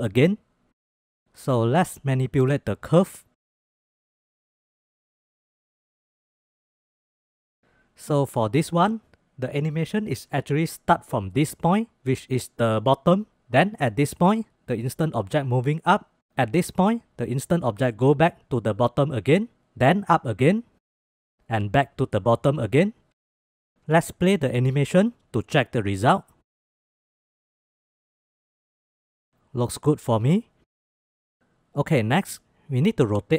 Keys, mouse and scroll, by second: 1.2 click, 2.4-3.8 drag, 4.7 click, 5.4-6.8 drag, 7.1 click, 24.6-25.0 drag, 25.0 space, 26.7 space, 27.0 shift+click, 27.4 space, 29.5 space, 33.1 click.